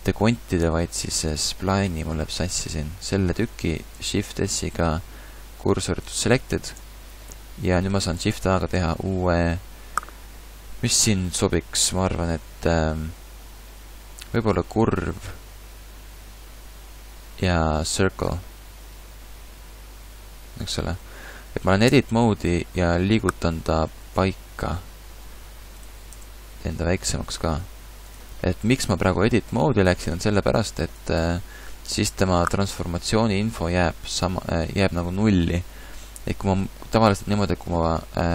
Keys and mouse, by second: 1.9 Tab, 4.1 shift+s, 6.8 Tab, 8.3 shift+a, 21.9 Tab, 23.8 r, 27.3 s, 29.6 s, 30.4 Tab, 36.0 click, 36.1-37.1 middle drag.